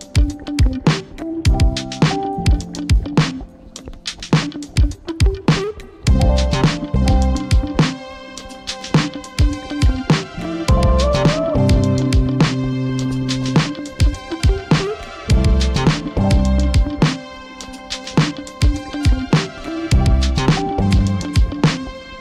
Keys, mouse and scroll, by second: 16.5-19.7 scroll down 1, 19.7 Up, 20.0 typing, 20.4 Up.